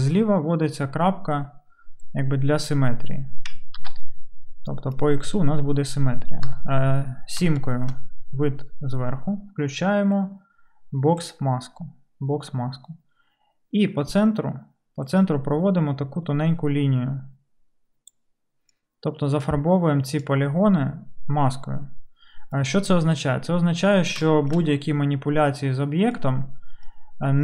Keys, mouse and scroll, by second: 3.8 ctrl+z, 6.5 KP_7.